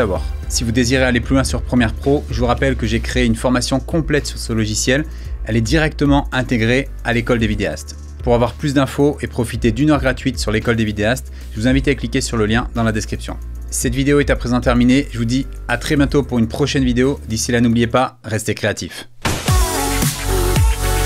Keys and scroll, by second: 9.1 space, 9.4 space.